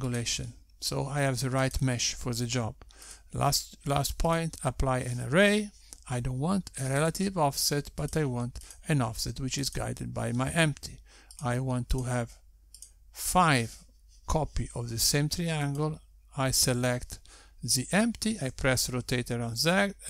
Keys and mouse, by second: 0.4 click, 3.2 click, 4.7 click, 8.6 click, 9.4 click, 10.2 click, 14.1 click, 14.2 click, 17.1 click, 19.9 r.